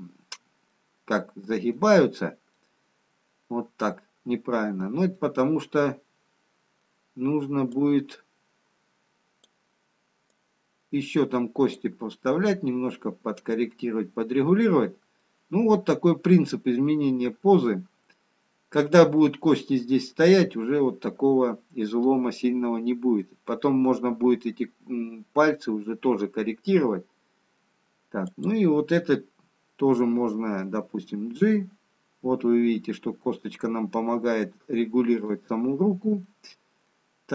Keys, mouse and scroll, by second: 0.6 middle click, 2.7 middle click, 2.7-6.3 scroll up 2, 6.3 middle click, 8.0 click, 10.4 click, 12.1 middle click, 22.3 middle click, 25.9 middle click, 28.6 click, 30.7 g.